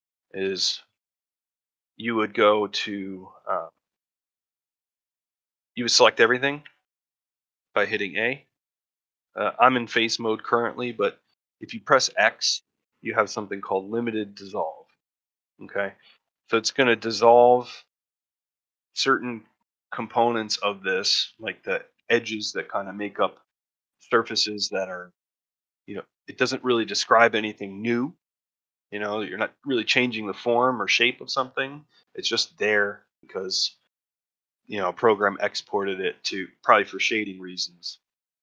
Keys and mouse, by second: 1.5 shift+middle click, 2.0 middle click, 2.7 shift+middle click, 4.0 shift+middle click, 4.6 shift+middle click, 8.3-10.2 middle drag.